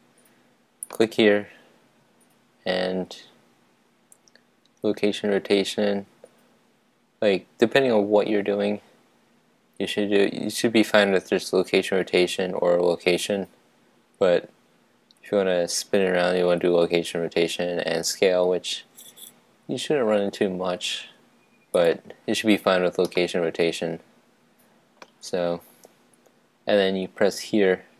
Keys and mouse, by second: 1.0-3.9 drag, 4.1 click, 21.7 click, 23.2-25.1 middle drag.